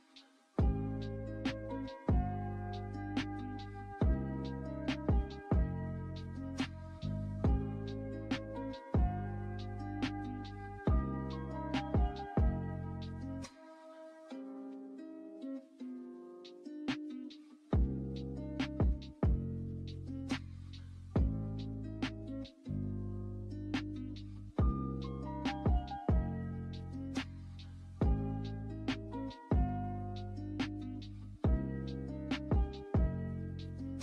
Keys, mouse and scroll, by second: 5.0 click, 5.2-8.7 drag, 8.7 ctrl+z, 11.4-15.9 drag, 23.9 right click, 24.8-30.8 drag.